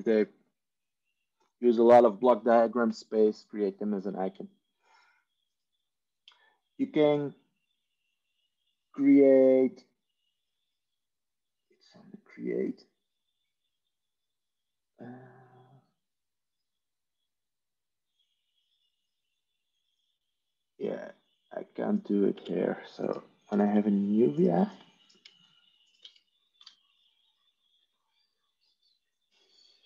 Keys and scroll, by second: 0.3 Tab, 22.2 Tab, 23.3 ctrl+n, 26.5 ctrl+c.